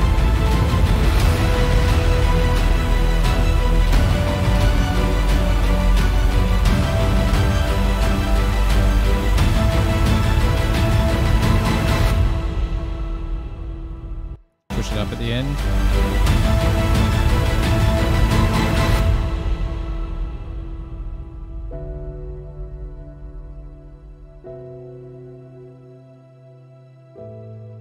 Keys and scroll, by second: 14.6 space, 14.9 space.